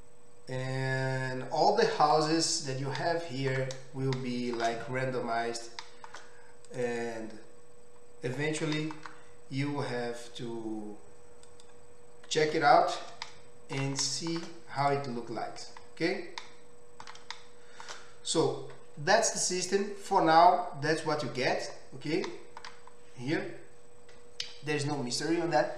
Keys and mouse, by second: 6.7 click, 6.9-25.7 middle drag, 8.8 e, 12.7 Tab.